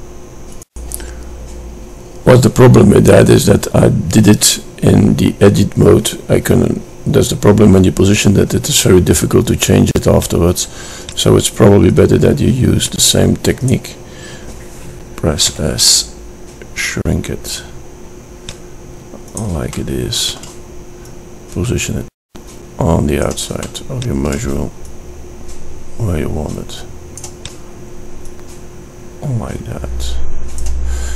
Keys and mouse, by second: 14.7 s, 19.1 middle click, 20.5 middle click, 22.2 click, 22.8 middle click, 25.8-27.5 middle drag, 29.5-31.1 middle drag.